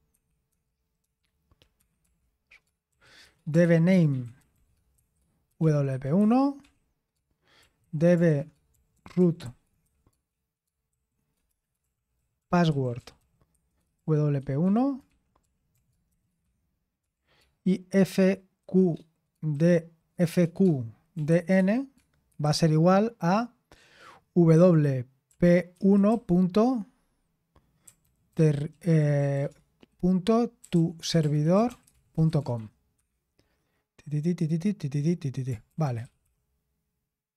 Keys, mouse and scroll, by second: 0.0-9.8 typing, 11.9-17.0 typing, 18.1 typing, 19.5-22.8 typing, 24.3-26.2 typing, 27.8-33.4 typing, 35.7-36.5 typing.